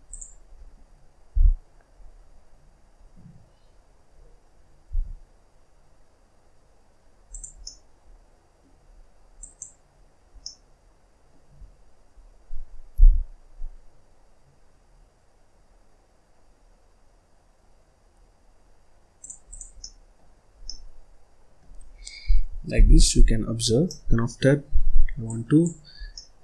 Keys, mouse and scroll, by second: 0.0 click, 1.3 g, 7.5-8.8 middle drag, 8.8-9.3 scroll up 1, 9.3 click, 10.2 scroll down 1, 10.3-11.5 middle drag, 11.5-12.1 scroll down 1, 12.1-12.4 scroll up 2, 12.4-12.7 scroll down 1, 12.9 g, 19.4 click, 19.7 middle click, 20.4 scroll down 2, 20.6-21.7 middle drag, 21.7-22.0 scroll down 1, 22.0-22.7 scroll up 1, 22.7 ctrl+s, 23.2 scroll down 4, 23.8 middle click, 24.6-25.2 scroll up 2, 25.2 click, 25.9 scroll down 2, 26.1 middle click.